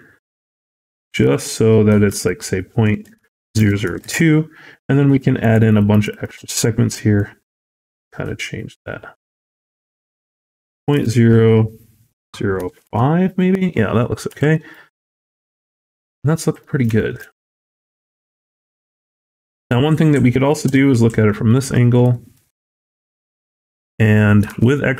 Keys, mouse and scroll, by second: 2.0 click, 3.5 KP_0, 5.3 click, 5.6 click, 5.8 click, 6.0 click, 7.0 shift+click, 9.6 click, 13.9-14.4 scroll down 4, 14.2 a, 14.4 middle click, 14.6-15.2 scroll up 4, 15.2 middle click, 16.3 scroll down 2, 16.5 middle click, 16.8 shift+middle click, 17.1 scroll up 2, 17.6 middle click, 18.5 scroll up 1, 19.3 Tab, 19.7 scroll down 3, 20.5 KP_1, 21.0 scroll up 1, 21.3 shift+middle click, 21.6-22.6 scroll up 6, 22.0 shift+middle click, 23.0 shift+middle click, 24.4 alt+z.